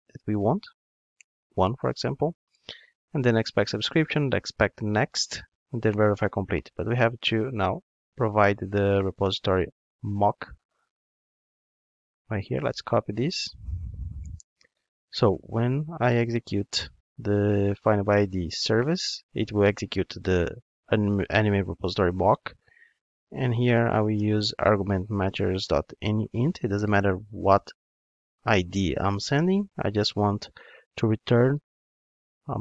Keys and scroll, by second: 13.4 super+c, 19.2 Return, 25.2 Return, 27.3 Return.